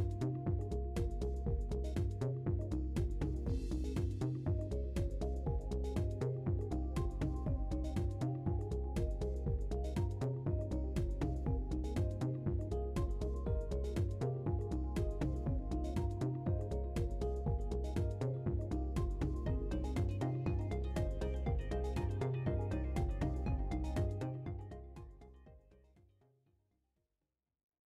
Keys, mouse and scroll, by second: 1.7 Tab, 2.7 KP_3, 4.1 shift+w, 7.3 click, 8.0 shift+w, 10.0 click, 10.4 scroll down 1, 10.7 middle click, 11.6 scroll up 1, 12.4 Tab, 12.7-14.5 middle drag, 14.5 scroll up 2, 15.1 KP_1, 16.2 Tab, 16.8 shift+Tab, 16.9 shift+w, 18.4 right click, 19.2-24.8 drag, 25.1 scroll down 1, 25.5 middle click, 26.4 scroll up 1, 27.0 Tab.